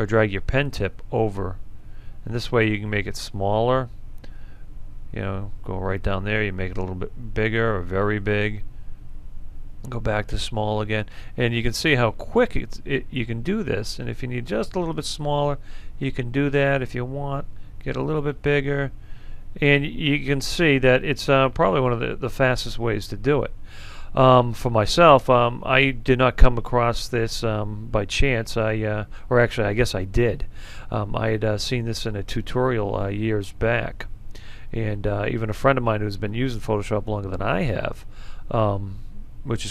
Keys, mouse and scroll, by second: 4.7 click, 6.3 alt+right click, 7.8-9.3 drag, 9.5-11.4 alt+right drag, 11.4-12.8 drag, 13.7 alt+right click, 15.2 click, 17.0 alt+right click, 18.2-20.0 drag, 20.2 alt+right click, 21.3-24.0 drag.